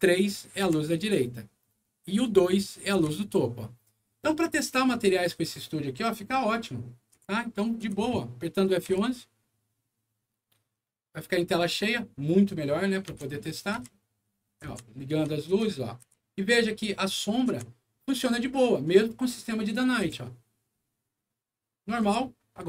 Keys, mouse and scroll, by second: 0.5 3, 2.8 2, 4.7 1, 7.1 3, 7.7 2, 8.8 F11, 13.0-15.9 typing, 17.4 3, 19.9 c.